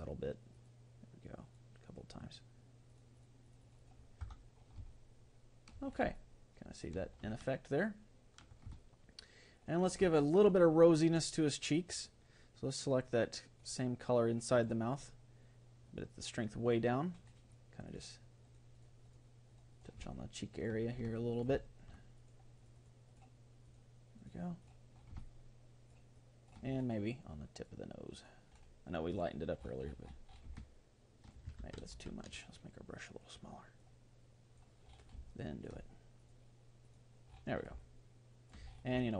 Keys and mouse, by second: 0.5-5.5 drag, 4.3 Tab, 4.9-11.9 middle drag, 11.9-14.7 drag, 15.9-20.3 drag, 20.3-22.2 middle drag, 22.2-26.2 drag, 25.7-28.5 middle drag, 27.5-31.0 drag, 30.5-32.1 middle drag, 31.6 ctrl+z, 32.1 ctrl+z, 33.8-35.5 drag, 35.3 middle click, 36.2-38.5 drag, 38.5-39.1 middle drag.